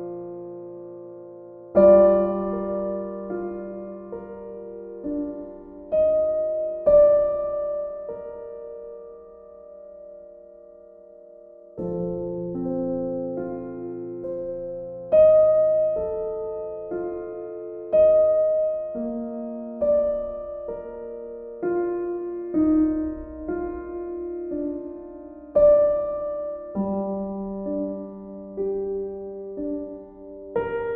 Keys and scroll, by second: 12.0 ctrl+u.